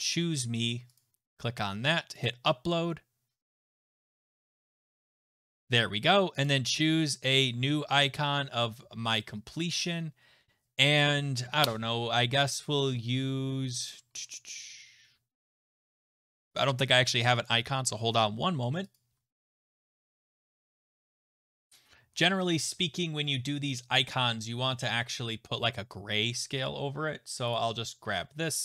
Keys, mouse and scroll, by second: 1.0 click, 2.2 click, 6.4 click, 8.9-11.4 scroll, 13.2-14.1 scroll, 14.1-14.5 scroll, 16.1-17.5 scroll, 18.9 click, 21.2 shift+click, 27.5 click.